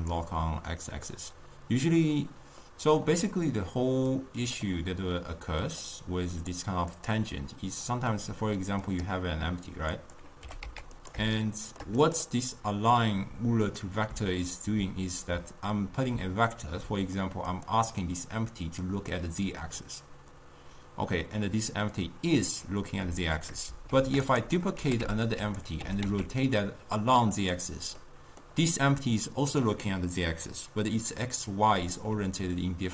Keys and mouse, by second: 4.3-7.2 drag, 10.2 click, 10.6 g, 11.5-12.3 shift+middle drag, 12.3 click, 17.8 click, 18.2-24.1 middle drag, 24.1 shift+d, 24.9 g, 25.9 r, 28.1-32.9 middle drag.